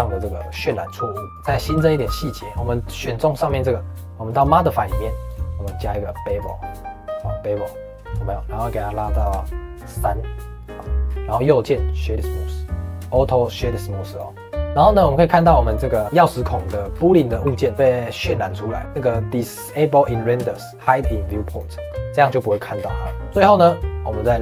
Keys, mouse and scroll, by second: 0.3 scroll down 3, 0.5 shift+middle click, 1.3 click, 1.7 shift+middle click, 2.0-4.2 scroll up 2, 4.2 click, 5.2-7.9 drag, 9.0-11.0 drag, 11.0-11.3 scroll up 2, 11.3-14.1 right drag, 14.6 click, 14.7 scroll up 2, 15.2 click, 15.6 click, 16.0-16.4 scroll down 3, 16.4 shift+middle click, 16.6-17.2 scroll up 5, 17.3 g, 20.5 click, 21.4 click, 22.1-23.2 scroll down 16, 23.2 click, 24.3 click.